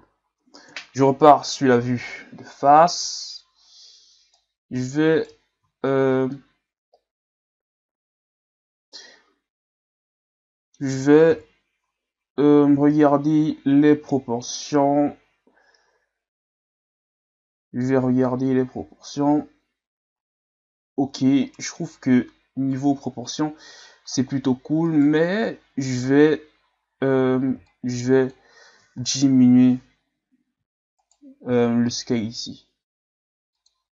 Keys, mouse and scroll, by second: 0.6 KP_1, 2.1-3.0 scroll up 3, 3.0 Tab, 4.4 right click, 5.6 ctrl+z, 6.3-9.3 middle drag, 11.3 KP_3, 12.8 z, 18.8 z, 19.1 z, 24.8 alt+right click, 27.5 b, 31.0 alt+right click, 32.1 s.